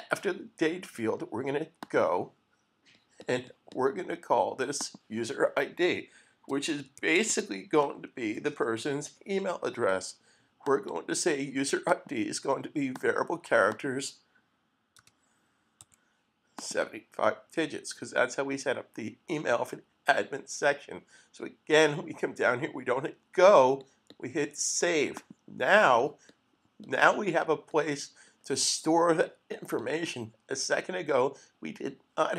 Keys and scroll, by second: 6.3-9.5 typing, 10.9 typing, 15.0-17.5 typing.